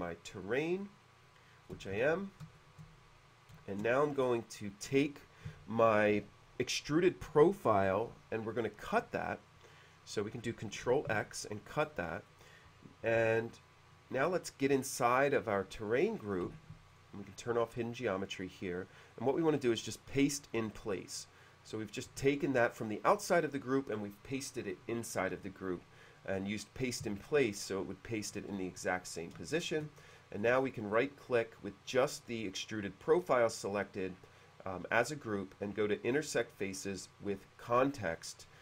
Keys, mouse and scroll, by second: 2.1 shift+c, 2.7-3.9 shift+middle drag, 11.2 ctrl+x, 12.0 middle click, 14.8-15.8 drag, 15.9 click, 16.4 h, 17.0 click, 19.3 click, 20.5 click, 29.5-30.2 shift+middle drag, 30.5 right click, 36.9-38.6 drag.